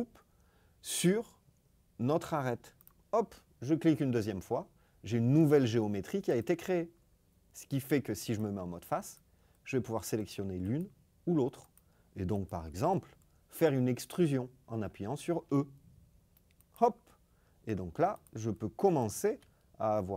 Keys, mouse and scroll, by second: 2.7 click, 6.3 click, 8.1 click, 9.0 click, 10.6 click, 11.6 click, 15.3 e, 19.2 e.